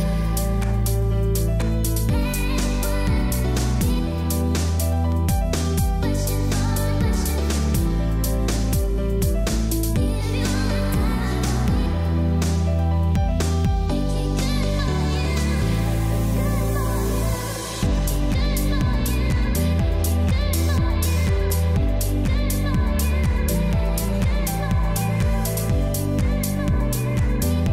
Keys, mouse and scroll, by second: 0.1 ctrl+shift+a, 6.4 click, 8.5 click, 12.1 click, 13.2 alt+click, 14.0-17.5 typing, 14.2 click, 14.8 click, 16.4 click, 19.0-20.4 typing, 19.2 click, 20.5 click, 21.8-23.9 typing, 21.9 click, 22.8 click, 23.8 click, 25.8-26.7 typing, 26.0 click, 26.5 click, 27.6 click.